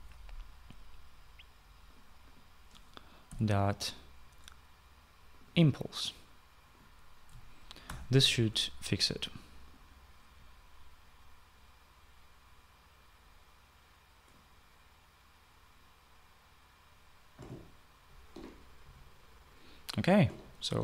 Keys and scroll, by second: 0.0-0.1 typing, 3.9 ., 8.5 ctrl+s, 18.7-20.8 typing.